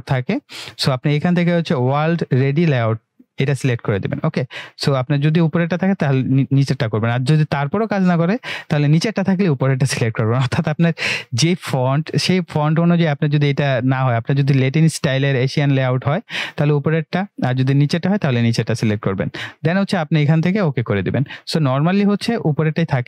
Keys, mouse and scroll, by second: 20.4-21.6 drag.